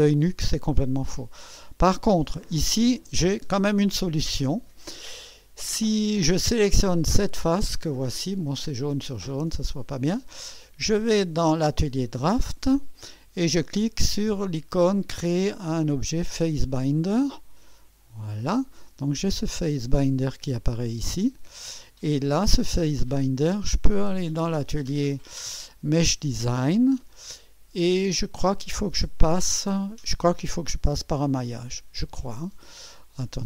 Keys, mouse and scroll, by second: 0.0-2.0 drag, 7.0-9.7 drag, 11.2-12.6 drag, 17.7 click, 20.7 click, 21.0 space, 21.8 click, 22.7 click, 24.0 click, 26.0 click, 27.1 click, 30.6 click.